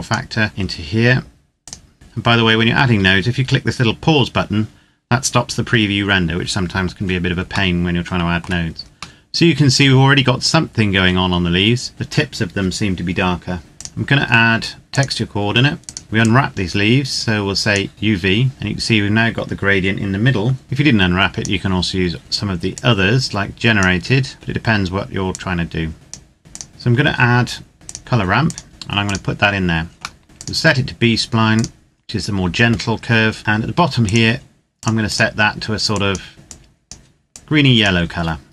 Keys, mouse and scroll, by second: 1.6 click, 1.9-3.4 scroll down 1, 6.7-7.5 scroll down 1, 7.7 shift+middle click, 9.1 middle click, 13.6 click, 18.5-19.2 scroll up 1, 20.6 click, 22.7 click, 24.2-25.0 scroll down 1, 25.0 click, 27.8 click, 28.8 click, 29.8 scroll up 1, 29.9 shift+middle click, 30.2 click, 32.6-33.4 scroll up 1, 33.8 click, 36.5 click, 37.3 click.